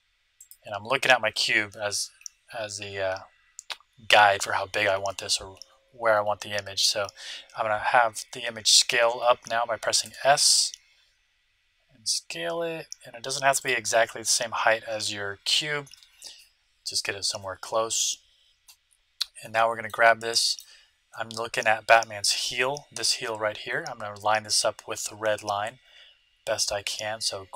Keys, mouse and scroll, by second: 10.0 s, 19.4-23.0 middle drag.